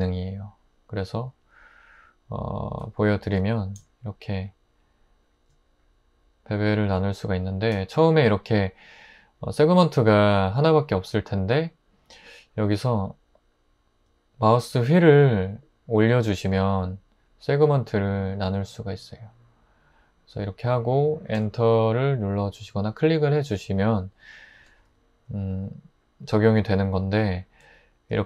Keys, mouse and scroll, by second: 3.2 super+b, 21.4 Return.